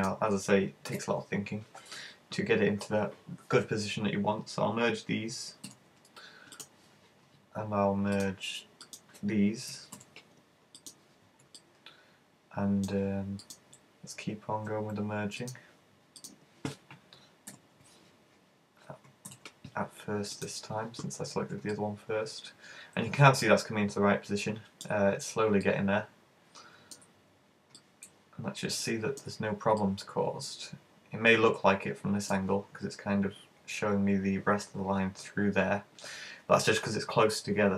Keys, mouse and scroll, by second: 1.0 super+z, 5.7 alt+m, 8.2 right click, 8.9 shift+right click, 10.0 alt+m, 11.6 middle click, 13.6 right click, 15.5 shift+right click, 16.2 shift+right click, 17.5 alt+m, 19.3 alt+m, 21.7 middle click, 25.1-26.0 scroll down 6, 25.6 middle click, 27.2-27.8 scroll up 3, 27.8 middle click, 29.3-29.6 scroll up 3, 29.8 middle click.